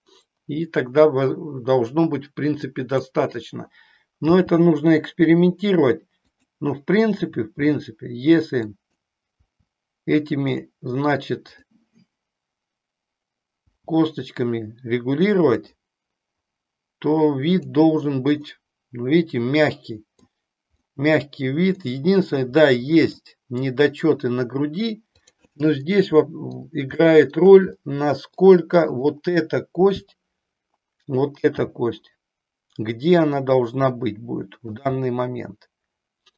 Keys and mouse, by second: 2.7 click, 4.2 g, 8.5 click, 9.4 g, 10.5 click, 11.5 click, 13.7 g, 17.5 click, 18.4-20.2 middle drag, 20.8-21.8 middle drag, 22.7 middle click, 25.2 click, 25.9 middle click, 27.0 shift+middle click, 27.8 middle click, 28.9 click, 31.5 g, 34.8 click, 35.0-36.3 middle drag.